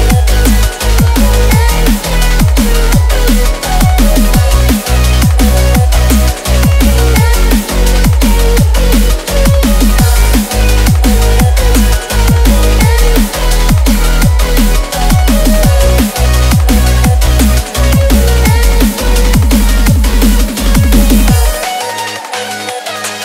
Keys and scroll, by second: 3.1 ctrl+z.